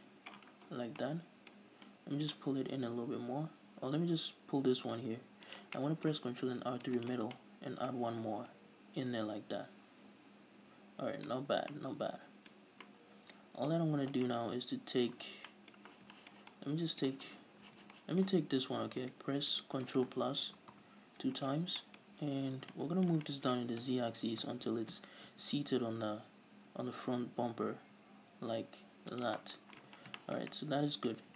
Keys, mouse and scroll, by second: 0.5-0.9 scroll down 2, 0.9-5.7 middle drag, 1.6 scroll up 1, 2.8 g, 5.7 click, 5.8-7.1 middle drag, 6.5 ctrl+r, 7.1 click, 7.4 middle click, 8.2 z, 8.3 scroll down 1, 11.1-19.2 middle drag, 11.5-12.3 scroll up 2, 12.9 scroll up 2, 16.0 scroll down 2, 17.3-17.8 scroll up 2, 17.8 z, 19.2 alt+right click, 20.5 ctrl+KP_Add, 21.6-22.0 scroll down 2, 22.0-29.3 middle drag, 22.2 z, 22.6 scroll up 2, 24.7 g, 29.3 shift+click, 29.5-30.3 scroll down 4, 29.6-31.3 middle drag, 31.2-31.3 scroll up 4.